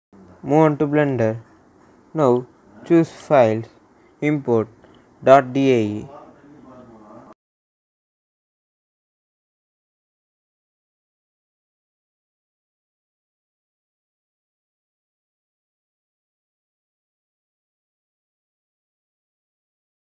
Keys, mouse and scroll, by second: 1.2 click, 1.2 typing, 3.6 click, 3.6 typing, 6.0 typing, 9.1 click, 11.0-11.4 typing, 14.1 click.